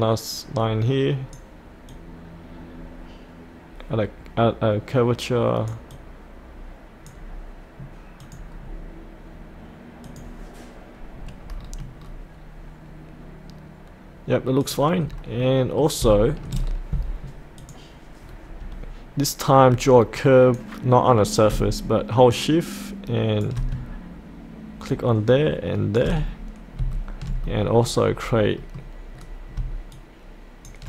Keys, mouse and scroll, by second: 8.6-10.0 scroll down 1, 10.0 click, 11.2-11.6 scroll down 1, 14.6 click, 15.0-15.4 scroll up 1, 15.4 middle click, 16.1 shift+middle click, 16.6-17.6 scroll down 1, 17.6 click, 18.2-20.2 scroll down 1, 20.2 click, 22.3 shift+click, 25.0 shift+click, 26.2-26.8 scroll up 1, 26.9 shift+middle click, 28.1-28.6 scroll down 1, 28.6 middle click, 29.1-29.5 scroll down 1, 29.9 shift+click.